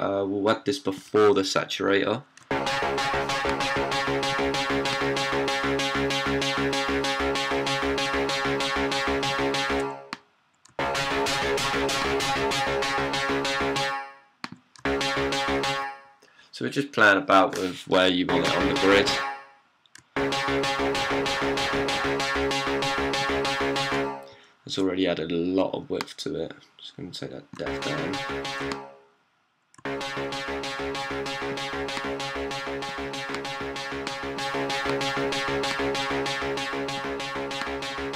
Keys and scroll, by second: 2.2-6.7 typing, 17.9-22.1 typing, 27.4-28.4 d, 29.6-31.5 typing.